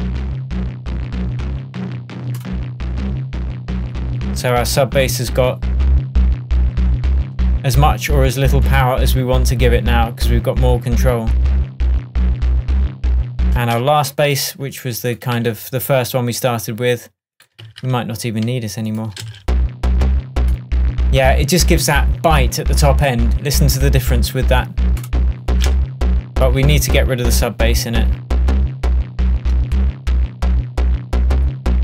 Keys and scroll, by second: 13.7 space, 15.4 super+c, 17.7 super+v.